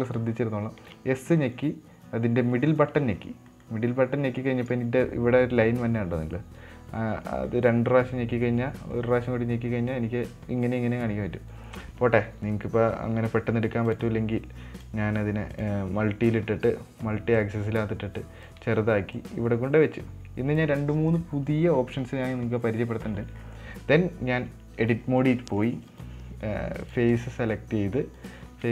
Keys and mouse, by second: 14.3 click, 15.2 click, 15.9 click, 17.8-18.9 drag, 19.6-21.0 drag, 21.2-21.6 middle drag, 22.5 KP_Decimal, 23.2 middle click, 23.9 middle drag, 24.7 Tab, 25.6 middle click, 26.3 right click, 27.2 click, 27.5 click, 28.5 right click.